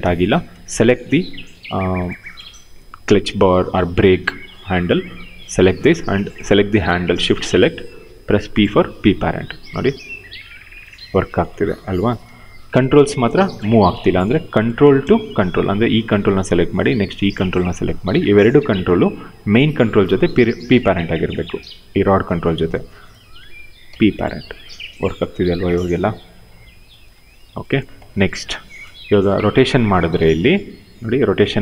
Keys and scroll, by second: 2.5 w, 7.8 p, 9.5 e, 12.0 ctrl+z, 23.5 p, 26.7 ctrl+z, 30.1 ctrl+z, 31.5 ctrl+z.